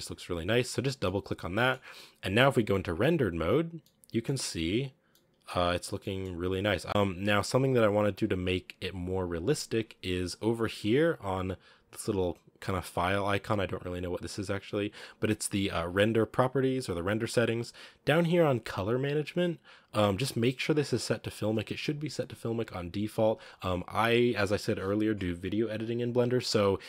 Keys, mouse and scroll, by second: 0.0 click, 0.8 scroll down 3, 0.9-1.6 middle drag, 1.6 scroll up 3, 2.5 z, 3.8-4.3 middle drag, 4.3 scroll down 2, 5.0-6.8 middle drag, 6.8 scroll up 1, 6.9-8.0 middle drag, 8.0 click, 10.6-12.7 drag, 21.5-26.8 drag.